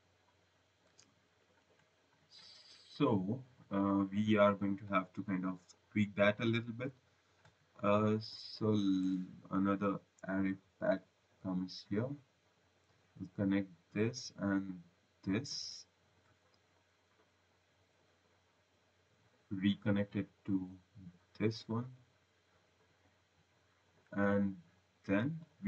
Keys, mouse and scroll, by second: 1.4 Delete, 1.8 click, 2.6 right click, 8.9 click, 10.9 v, 13.4 click, 14.9 click, 16.6 click, 17.8 click, 18.9 click, 22.0 click, 22.6 right click, 23.5 right click, 25.2 click.